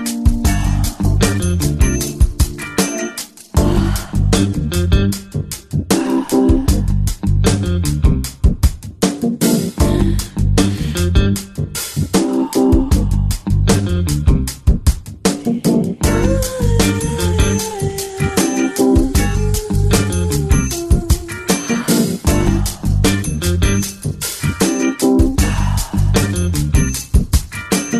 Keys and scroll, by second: 11.0 ], 14.5 [, 15.2 [.